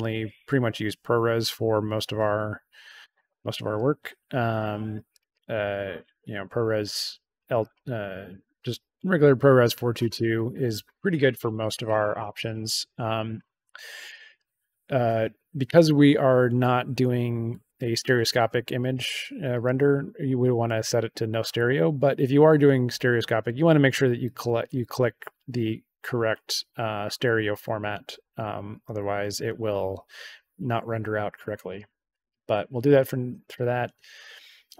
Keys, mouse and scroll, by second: 3.1 click, 5.1 click, 7.5 click, 8.5 click, 14.0 click.